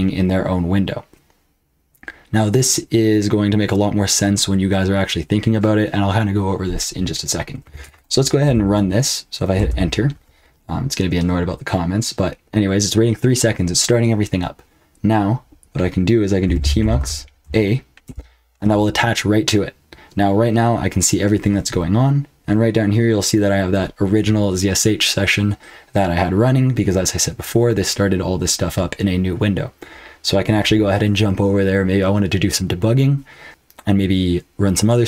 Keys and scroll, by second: 7.5-8.4 typing, 9.5 Return, 16.2-17.4 typing, 18.0 Return.